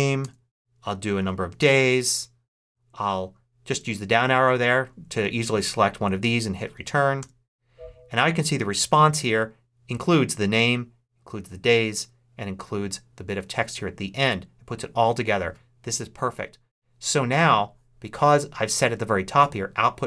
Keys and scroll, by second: 0.0-1.1 typing, 1.5 Return, 2.6 Down, 4.2 Down, 4.8 Up, 5.3 Down, 7.1 Return.